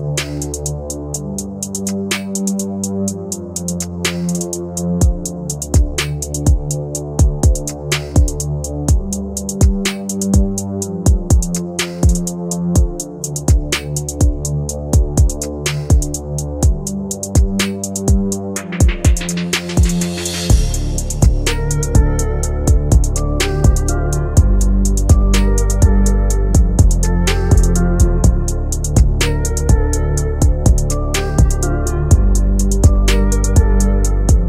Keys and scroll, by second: 2.4 c, 3.0 e.